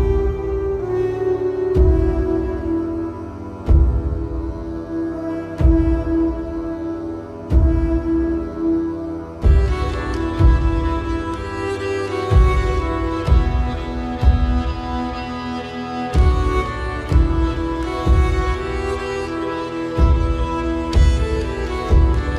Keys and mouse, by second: 0.1 z, 1.2 click, 4.0-6.5 drag, 7.4 click, 9.7 middle click, 10.5 click, 11.4 KP_1, 12.2 middle click, 13.3 e, 16.5 t.